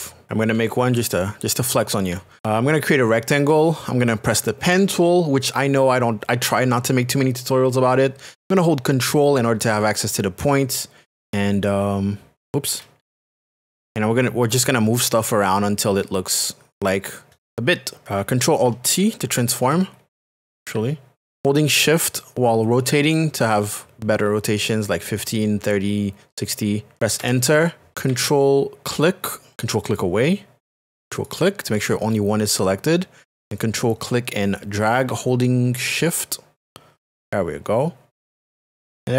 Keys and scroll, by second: 4.6 shift+p, 13.0 ctrl+z, 18.7 alt+space, 19.4 alt+t, 20.7 t, 27.2 Return.